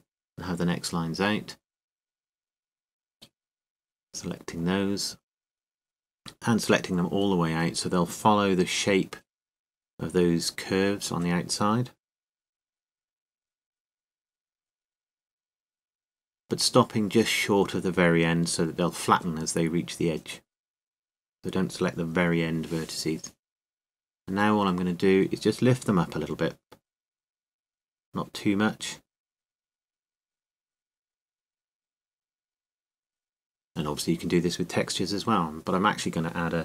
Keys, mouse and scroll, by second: 1.1-3.1 right drag, 4.9-6.3 right drag, 7.3 middle click, 8.0-17.0 right drag, 17.0-18.5 middle drag, 18.5 click, 18.7-22.1 right drag, 22.1 middle click, 25.7 middle click, 28.1-30.0 drag, 32.5-34.2 middle drag.